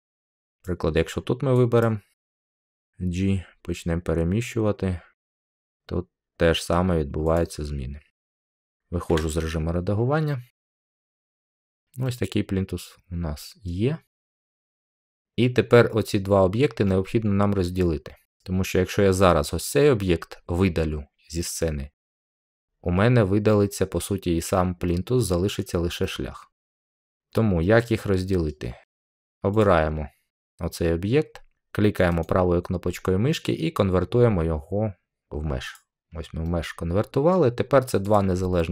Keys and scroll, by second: 2.7 g, 9.0 Tab.